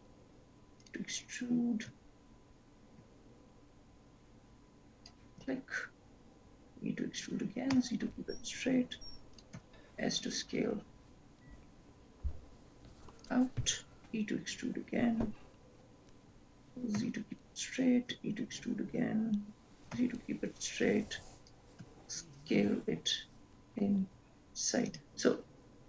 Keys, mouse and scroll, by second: 2.2 ctrl+z, 3.1 e, 5.5 e, 9.7 s, 14.1 e, 18.2 e, 21.9 s.